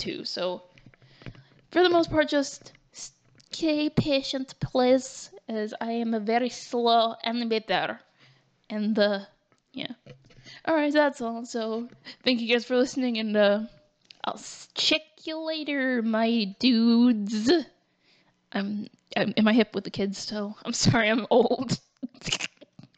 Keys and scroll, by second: 11.2 ctrl+t, 12.5 ctrl+z, 16.9 ctrl+t.